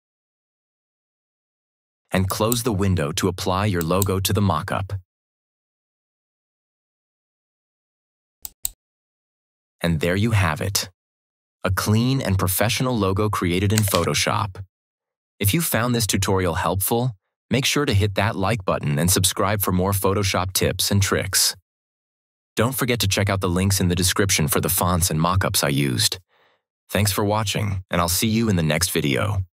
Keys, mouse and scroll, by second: 2.2 click, 8.3 click, 13.6 click, 13.8 ctrl+=.